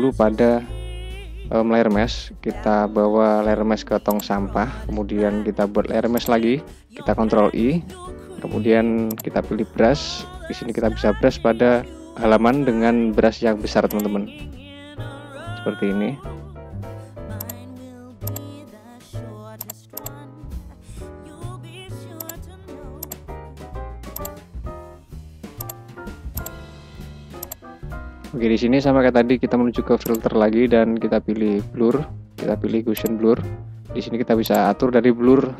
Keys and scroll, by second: 6.8 ctrl+i, 10.3 ], 11.9 [, 13.0 ], 15.3 [, 20.7 [.